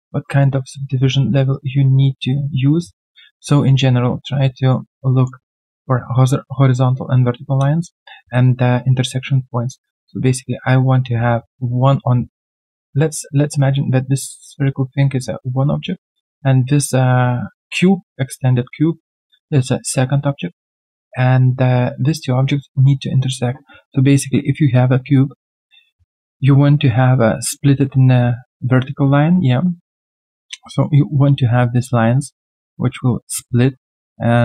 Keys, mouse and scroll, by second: 7.5 middle click.